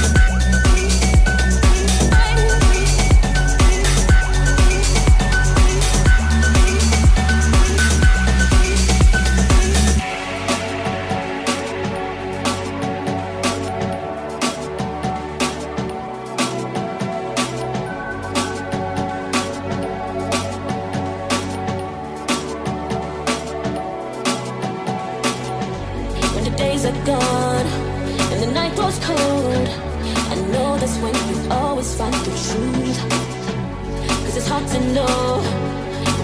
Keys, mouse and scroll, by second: 0.0-5.0 middle drag, 5.0 right click, 5.0 shift+middle click, 6.0 middle click, 6.3-13.0 middle drag, 7.4 shift+s, 8.3 shift+a, 13.0 click, 13.4-15.6 shift+drag, 14.3 g, 15.6-20.3 shift+middle drag, 18.1 r, 18.1 g, 19.5 g, 20.5 middle click, 21.3-22.7 middle drag, 22.1 n, 23.0-24.7 ctrl+middle drag, 23.0 n, 24.5 n, 25.0 n, 25.2-26.2 ctrl+drag, 26.9 KP_0, 29.6 KP_0, 30.5-36.2 middle drag, 34.6 KP_0.